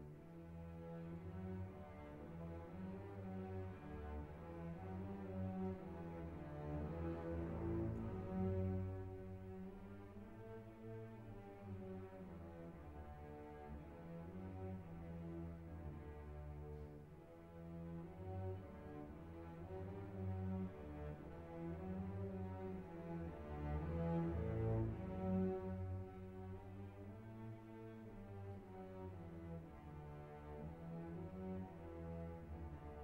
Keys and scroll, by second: 24.9 Delete.